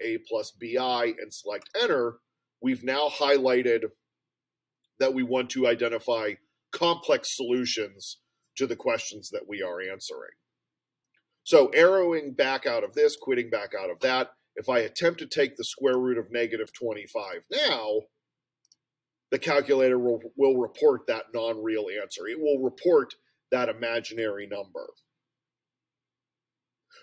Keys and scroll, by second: 1.6 Return, 17.2 2, 17.7 5, 18.7 Return.